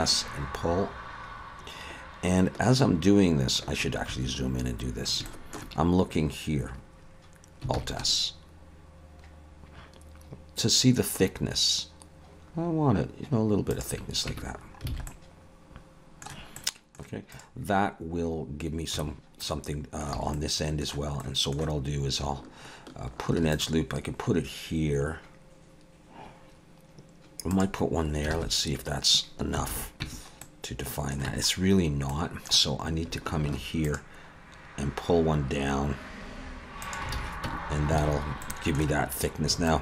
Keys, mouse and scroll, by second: 4.7-5.2 scroll up 1, 5.2 scroll up 2, 5.3 shift+middle click, 7.7 alt+s, 14.3 Tab, 14.5-14.9 scroll down 3, 14.9 alt+a, 15.1 middle click, 16.6 middle click, 17.3 click, 17.8 scroll up 3, 19.0 Tab, 19.4 middle click, 20.2 alt+a, 20.3 middle click, 21.2 middle click, 23.3 ctrl+r, 28.4 alt+super+a, 29.7 alt+a, 30.0 Tab, 30.4 middle click, 31.3 Tab, 32.1 middle click, 33.5 ctrl+r, 37.1 alt+a, 37.5 Tab, 38.0 alt+a, 38.2-38.7 scroll down 2, 38.4 middle click, 39.3-39.7 scroll up 2, 39.7 middle click.